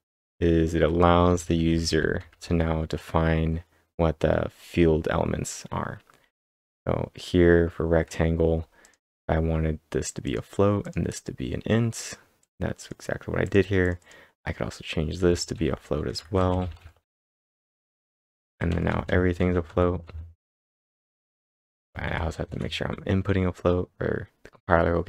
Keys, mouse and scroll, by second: 0.2-3.0 typing, 4.2-5.0 typing, 6.4 click, 6.4-7.6 typing, 7.6 scroll up 3, 8.8 click, 9.1 double click, 10.3 click, 10.8 click, 11.7-12.4 scroll down 1, 12.4 click, 12.4-12.8 scroll down 1, 12.8 click, 13.4 click, 13.8 click, 14.0 double click, 15.2-22.6 typing, 22.6 double click.